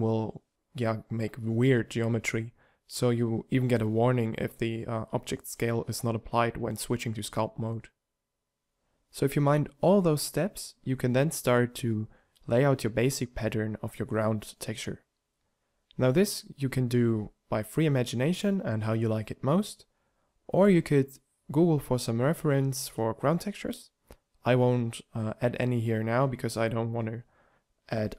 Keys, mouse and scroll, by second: 9.6 g, 11.5 shift+d, 14.8 shift+d, 19.4 shift+d, 21.4 shift+d, 23.0 shift+d, 25.4 shift+d, 26.5 shift+d, 27.7 shift+d.